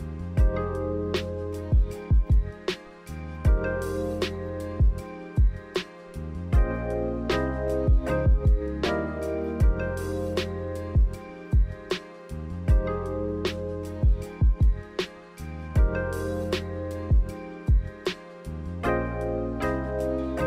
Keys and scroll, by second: 11.1 x, 14.6-16.3 typing.